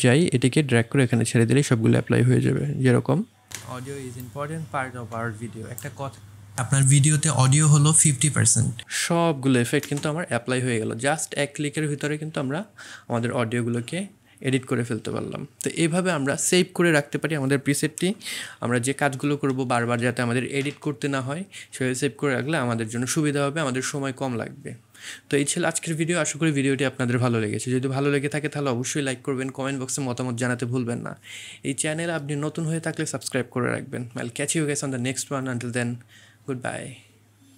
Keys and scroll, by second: 3.5 space.